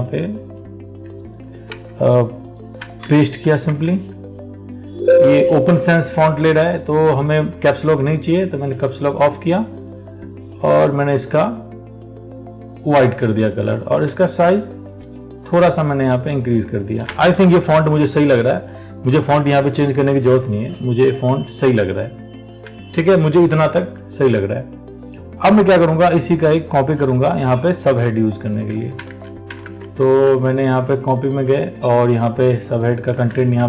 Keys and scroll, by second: 3.2 ctrl+v, 3.9 ctrl+a, 13.7 ctrl+t, 28.9 ctrl+a, 29.8 alt+Tab, 33.5 ctrl+c.